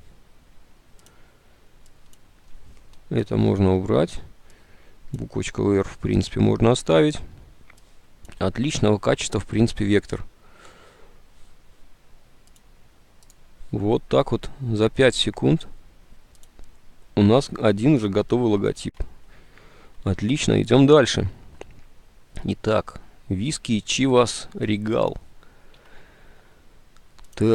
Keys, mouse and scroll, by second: 3.1 Delete, 18.8 ctrl+s.